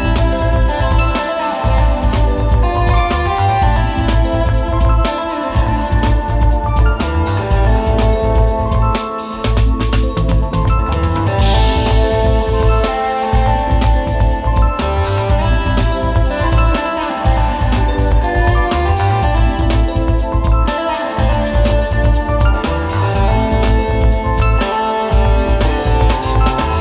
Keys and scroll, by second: 0.7 space, 2.0 super+z, 2.9 super+z, 3.3 space, 5.3 super+z, 6.9 super+z, 7.9 super+j, 8.5 space, 11.4 space, 12.0 space, 12.9 space, 16.0 super+], 16.8 super+z, 17.2 super+z, 19.2-22.9 typing, 24.7 space, 24.9 space, 25.3 space, 26.3 super+g, 26.5 space.